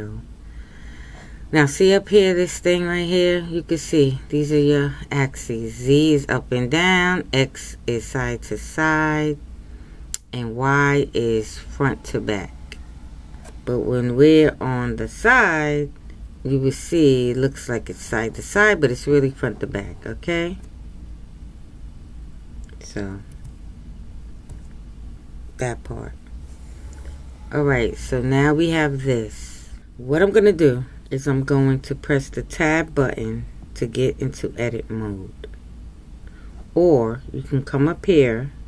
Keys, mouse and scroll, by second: 15.0 KP_3.